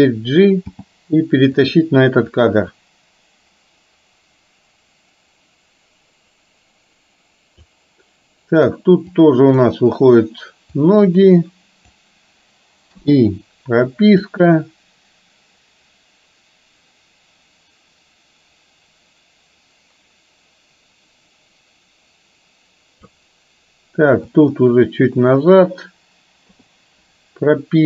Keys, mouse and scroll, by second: 0.8 g, 2.4-7.7 drag, 9.2 click, 10.9-12.1 drag, 14.3-23.3 drag, 24.6 click, 26.6 i.